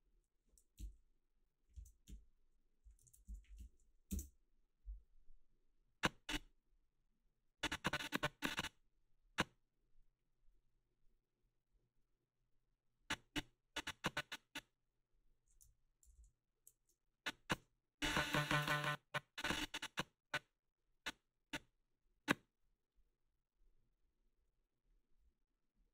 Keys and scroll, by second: 0.8-4.1 typing, 3.1 ctrl+a, 4.1 Return, 16.0 ctrl+c, 17.5 space, 18.6 space.